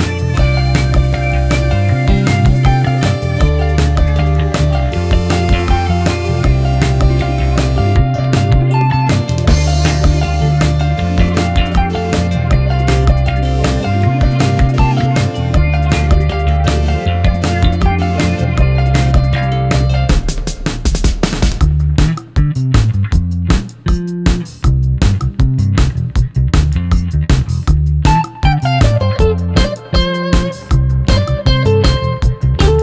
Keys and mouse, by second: 0.1-1.3 middle drag, 1.8 shift+middle click, 2.2 middle drag, 3.1 click, 3.5 shift+middle click, 4.6-5.5 middle drag, 7.5 ctrl+a, 8.4 shift+click, 10.4 middle click, 11.0 Tab, 11.6 middle click, 13.8-17.1 drag, 17.4-18.8 drag, 17.4-18.8 middle drag, 17.4-18.8 right drag, 19.3 click, 19.3-21.0 middle drag, 19.3 right click, 21.3 shift+middle click, 21.8 ctrl+middle click, 23.0 middle click, 28.5 Tab, 29.3 shift+click, 30.0-30.5 drag, 30.8 Tab, 32.3 3, 32.5 click.